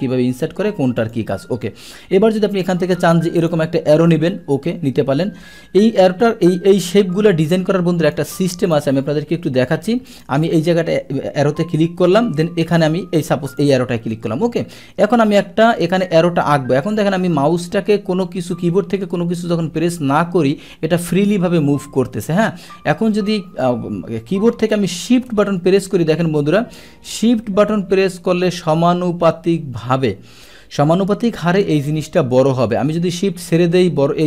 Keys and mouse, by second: 1.0 click, 3.4 click, 4.0-8.1 drag, 8.7 click, 9.8 Delete, 10.1 click, 13.5 click, 15.0-34.2 drag.